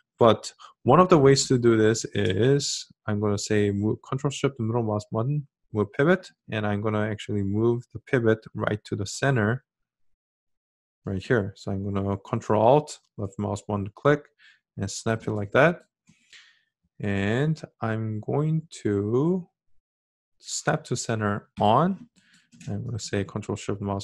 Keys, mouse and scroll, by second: 2.9-7.9 ctrl+shift+middle drag, 12.5-18.0 ctrl+alt+drag, 22.8-24.0 ctrl+shift+middle drag.